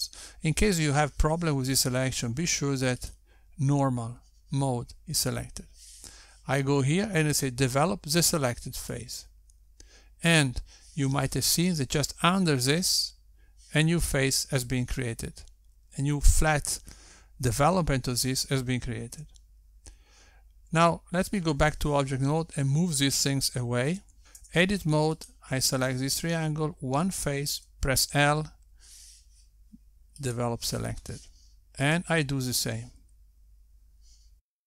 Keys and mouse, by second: 5.1 click, 11.0 click, 22.9 Tab, 26.6 Tab, 27.3 click, 29.8 l, 32.4 click, 34.0 click.